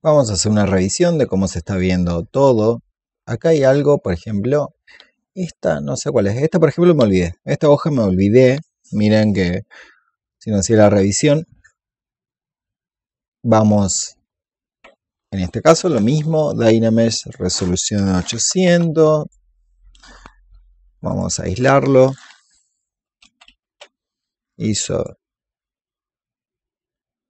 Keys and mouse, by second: 5.4 alt+click, 6.5-13.5 drag, 17.0 click, 18.0 KP_8, 19.1-24.0 drag, 24.4 shift+click.